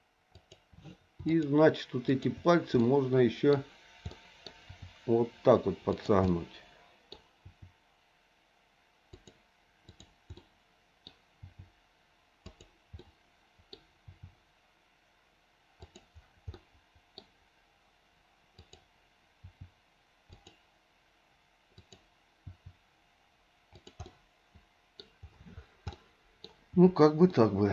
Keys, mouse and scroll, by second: 1.3 shift+click, 2.1 shift+click, 2.8 middle click, 4.2 middle click, 4.7 r, 6.2 middle click, 7.5 r, 9.8 click, 10.4 middle click, 11.4 r, 13.0 middle click, 14.0 r, 16.6 middle click, 18.6 click, 19.3 r, 21.8 click, 22.7 r, 24.1 middle click, 25.9 middle click, 27.3 shift+middle click.